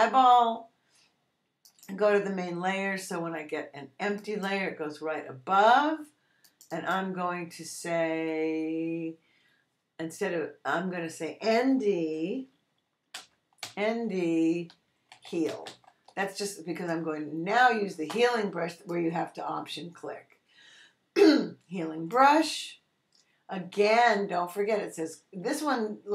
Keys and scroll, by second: 13.1 n, 13.6 d, 14.6-16.1 typing.